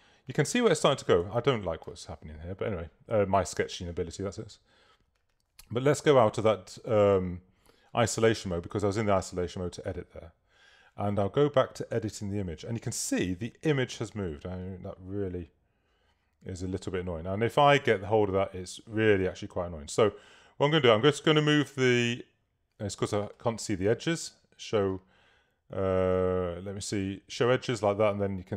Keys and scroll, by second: 1.3 super+-.